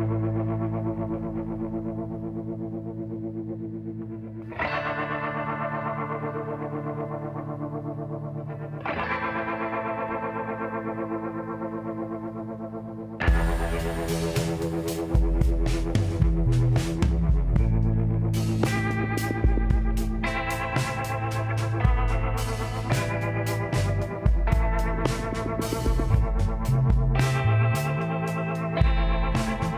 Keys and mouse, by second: 0.1 e, 2.9 s, 6.7 w, 11.4 z, 14.7 z, 15.1 click, 16.0 x, 17.0 middle click, 17.2 z, 20.0 middle click, 21.7 middle click, 22.6-27.9 drag, 24.5-26.2 middle drag, 27.1 w, 27.9 middle click.